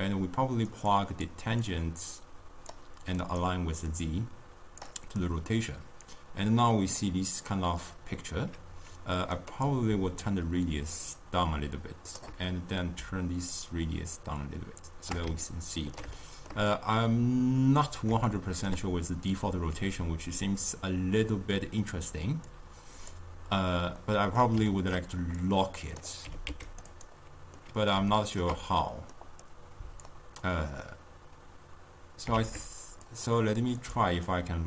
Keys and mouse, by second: 5.7-10.5 middle drag, 10.5-15.6 shift+drag, 15.6-32.4 ctrl+middle drag, 32.4 shift+d.